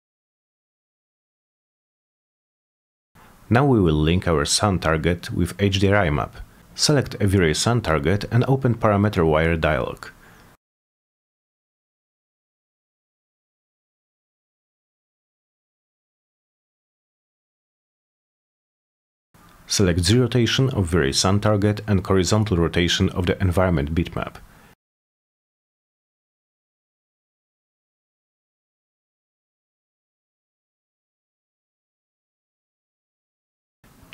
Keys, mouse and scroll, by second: 1.3 ctrl+z, 1.5 middle click, 1.7 scroll down 2, 1.7 scroll up 2, 1.9 e, 2.5-3.7 drag, 3.9 ctrl+z, 4.5 click, 5.9 click, 7.5 click, 10.7 click, 13.3 click, 14.4 click, 16.4 click, 17.5 click, 17.9 click, 18.2 click, 19.1 click, 21.0 click, 21.1 click, 21.3 click, 21.5 click, 21.8 click, 22.0 click, 23.2 click, 23.8 middle click, 25.4 click, 26.5 click, 26.8 click, 27.0 click, 27.2 click, 27.4 click, 27.6 click, 28.4 click, 28.6 click, 28.8 click, 29.0 click, 30.1 click, 32.4 click.